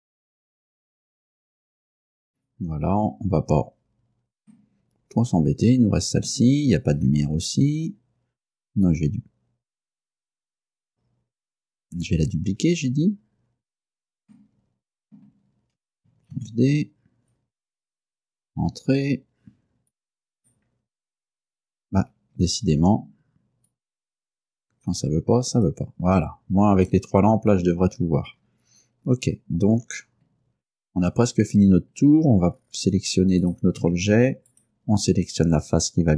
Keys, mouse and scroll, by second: 0.0-1.5 typing, 0.1 click, 0.1 scroll up 3, 0.2 middle click, 0.3 shift+click, 0.7 click, 0.8 right click, 0.9 shift+right click, 2.1 click, 3.1 Tab, 4.6-6.5 middle drag, 6.5 scroll up 1, 6.8-7.8 scroll down 6, 8.7 right click, 12.0 Escape, 14.4-15.5 middle drag, 16.4 shift+d, 18.7 Return, 20.0 right click, 22.3 Escape, 23.8-25.9 drag, 26.9 middle click, 28.0-29.1 scroll up 6, 29.4 scroll up 2, 29.9-30.2 scroll down 2, 31.1-31.6 scroll up 4, 33.5 right click, 33.9 Tab, 34.6 right click.